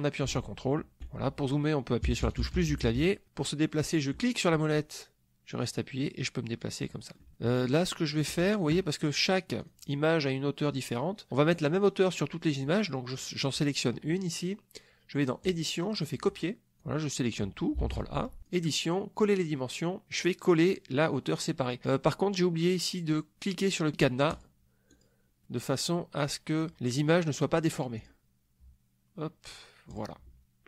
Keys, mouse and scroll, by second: 2.0 KP_Add, 4.2-7.3 middle drag, 7.3-8.3 drag, 8.4 click, 9.6 click, 13.2 click, 15.5 click, 17.8 ctrl+a, 18.5 click, 24.4 click, 24.9 click, 27.9 click, 30.0 click.